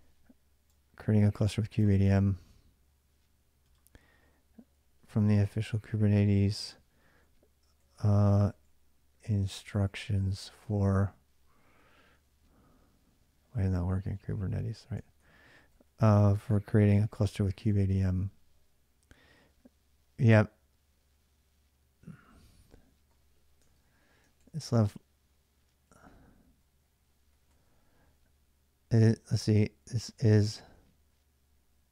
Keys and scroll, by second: 1.7 alt+Tab, 4.6-12.1 typing, 13.6-17.7 typing, 18.9 ], 22.9 ., 23.5 ctrl+[, 23.6 k, 24.0 k, 25.4-31.4 typing.